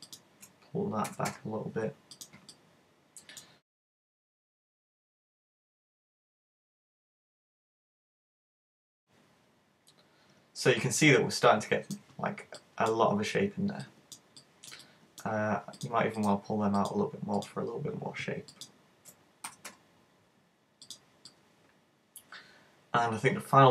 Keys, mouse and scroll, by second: 0.1 shift+right click, 1.1 g, 2.3 click, 2.6 middle click, 3.8 shift+right click, 3.9 middle click, 4.3 g, 4.7 click, 4.8 middle click, 5.8 right click, 5.9 shift+right click, 6.1 super+g, 7.3 right click, 7.6 middle click, 8.0 right click, 8.3 super+g, 8.3 shift+right click, 8.9 click, 8.9 middle click, 12.2-13.4 scroll down 5, 12.6 middle click, 13.4-13.9 scroll up 3, 13.9 middle click, 14.4 middle click, 15.8 right click, 16.2 shift+right click, 16.8 right click, 17.5 right click, 18.5 shift+right click, 19.5 g, 20.9 middle click, 21.3 middle click.